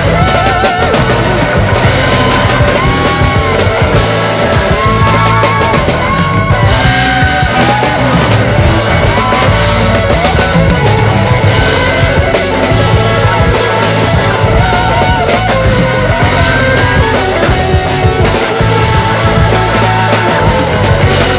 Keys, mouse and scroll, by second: 0.0-0.4 scroll down 3, 2.1-3.8 drag, 6.0 click, 8.6 ctrl+s, 8.9 click, 9.2 scroll up 4, 10.1-11.9 drag, 11.9 n, 12.7 click, 13.6-14.8 drag, 14.8-15.2 middle drag, 15.2-16.6 drag, 17.0-18.5 drag, 19.1-20.1 drag, 20.1-20.5 scroll up 5, 20.5-21.3 scroll down 5.